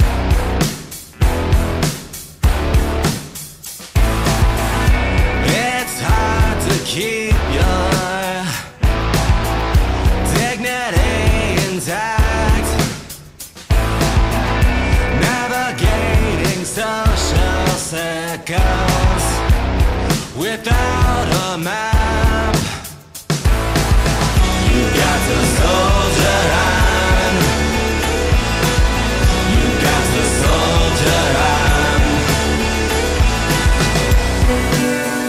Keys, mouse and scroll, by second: 3.6 ctrl+s, 9.0 click, 10.0 middle click, 13.0 shift+middle click, 25.6 middle click, 28.9 middle click, 34.1 click, 34.2 click.